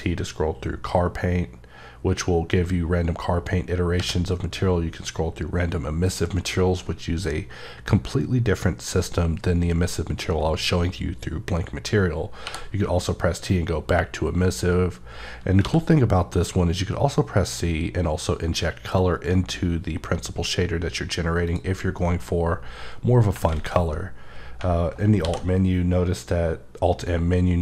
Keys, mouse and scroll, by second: 0.7-1.3 scroll up 2, 1.3-1.8 scroll up 1, 3.9 t, 4.6-6.0 scroll up 6, 7.0-8.0 scroll up 4, 8.5-9.2 scroll up 2, 9.3-10.6 scroll up 2, 10.6-11.2 scroll up 1, 12.4 t, 13.0-14.2 scroll up 5, 15.2-15.6 scroll up 5, 15.6 c, 16.3-17.6 scroll up 6, 17.8-19.1 scroll up 4, 19.1-20.0 scroll up 2, 20.0 scroll up 1, 21.8 click, 23.5 alt+a.